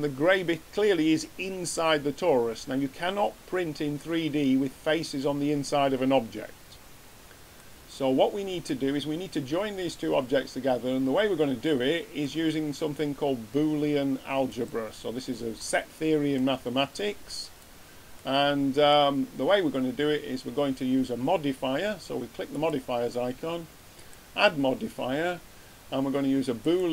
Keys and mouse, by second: 15.6-16.2 middle drag, 18.1-19.1 middle drag, 25.5 click.